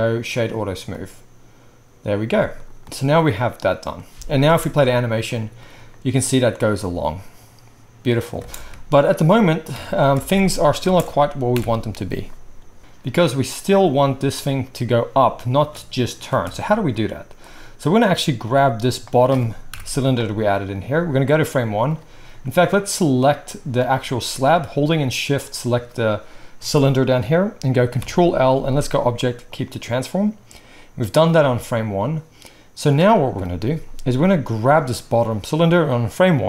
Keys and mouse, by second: 4.5 space, 8.4 space, 9.7 KP_1, 10.2 space, 10.8 space, 11.5 shift+Left, 13.6 middle click, 13.9-19.0 right drag, 15.5 space, 16.3 space, 18.4 g, 19.0-22.9 middle drag, 19.7 shift+Left, 22.9 click, 23.0-24.1 middle drag, 25.4 shift+click, 27.9 ctrl+p, 31.3-34.7 middle drag, 33.3 KP_1, 34.7-35.3 drag, 35.3-36.2 middle drag, 36.2-36.4 drag.